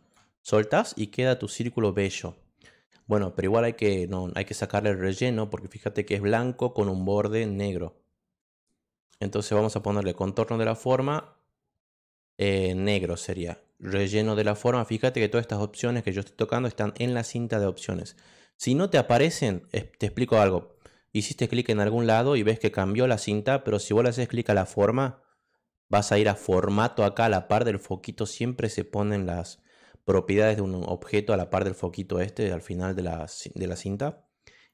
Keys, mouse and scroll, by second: 1.1-2.6 drag, 9.6 click, 11.0 click, 14.2 click, 19.5 click, 20.7 click, 24.4 click, 33.8 click.